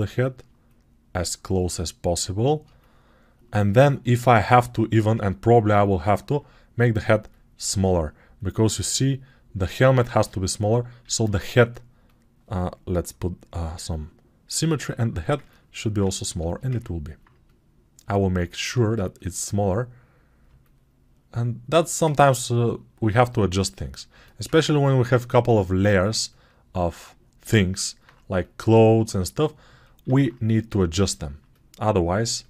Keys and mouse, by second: 3.3-13.2 drag, 11.1 alt+q, 13.2 middle click, 13.9-15.5 drag, 15.5-18.3 alt+right drag, 18.3-32.4 alt+drag, 25.8 alt+q, 30.1 alt+q.